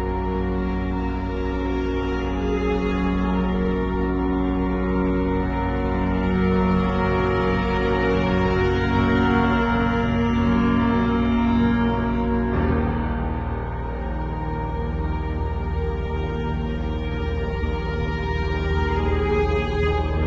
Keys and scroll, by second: 0.7 [, 7.8 ], 9.4 z, 10.1 space, 10.5 v, 11.9 super+l, 19.8 Return.